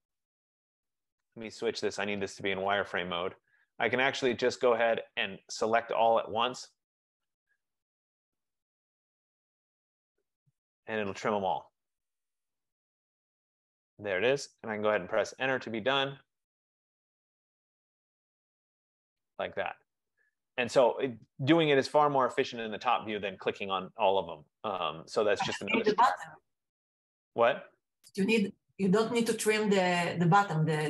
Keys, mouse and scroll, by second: 0.0-0.6 typing, 2.0 Return, 2.0 click, 3.2 typing, 3.2 click, 6.0 click, 15.1 Return, 18.6 click, 20.1-23.7 drag.